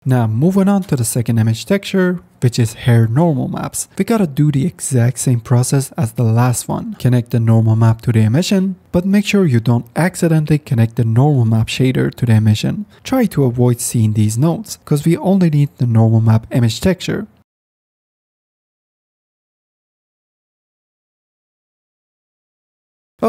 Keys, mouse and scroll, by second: 1.2 click, 2.4 click, 5.6 click, 6.3 middle click, 7.5 middle click, 9.1-11.2 drag, 12.3-13.5 middle drag, 17.8 click, 18.9-19.9 drag, 20.7 click, 21.9-22.7 drag, 23.1-23.2 drag.